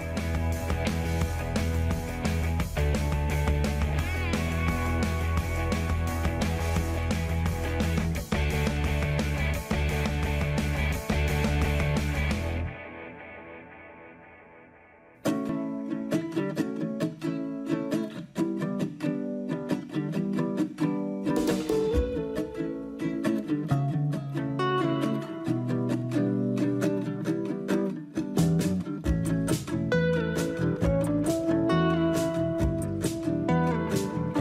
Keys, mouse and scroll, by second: 1.9 middle click, 1.9-4.7 scroll down 5, 10.4-11.5 scroll down 2, 11.5-12.1 scroll down 4, 13.0 ctrl+z, 13.0 middle click, 33.4 right click.